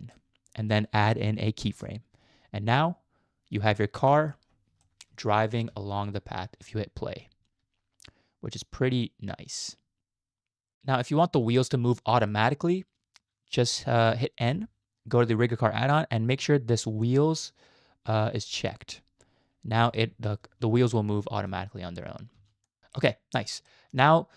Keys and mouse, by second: 1.7 click, 4.1 middle click, 4.8 shift+middle click, 5.7 space, 10.7 middle click, 10.7 KP_Decimal, 11.2-11.5 middle drag, 11.7 shift+middle drag, 12.1 middle click, 14.4 n, 18.5 click, 19.8 space, 21.0-21.6 middle drag, 22.3 space, 22.7 click, 22.8-23.1 middle drag, 23.7 shift+click, 23.8 shift+middle click.